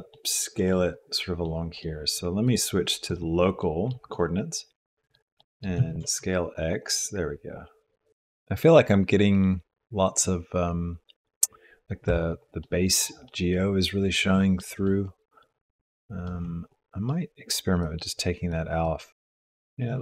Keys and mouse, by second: 0.1 click, 1.4 click, 1.7 middle click, 2.5-3.6 drag, 4.1-5.3 middle drag, 5.4 middle click, 5.8 s, 12.6 click, 13.2 middle click, 14.4 middle click, 15.0 middle click, 16.2 middle click, 17.8 click, 18.8 click, 19.0-20.0 drag.